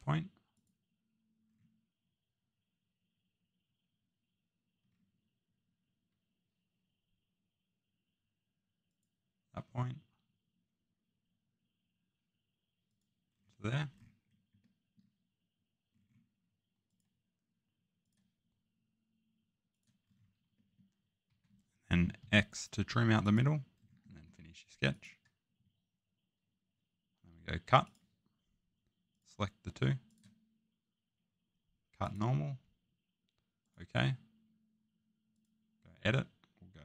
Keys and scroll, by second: 21.3 Escape, 22.2 Escape.